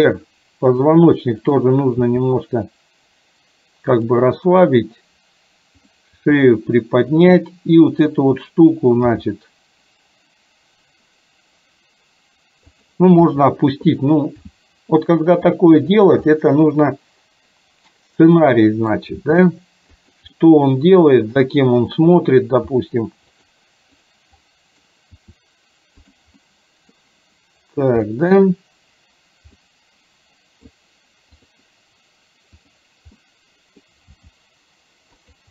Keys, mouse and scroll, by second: 2.1 r, 5.8 click, 6.3 r, 8.1 click, 9.1 g, 13.3 r, 14.6 g, 16.3-19.2 middle drag, 16.3 scroll up 1, 19.1 scroll down 1, 19.2 g, 20.5-21.1 middle drag, 20.5 scroll up 1, 22.8 r, 24.6 middle click, 25.2 r, 26.5 middle click, 28.2 middle click, 29.7-30.8 middle drag, 31.3 click, 32.7 click, 33.2 middle click, 34.1 g.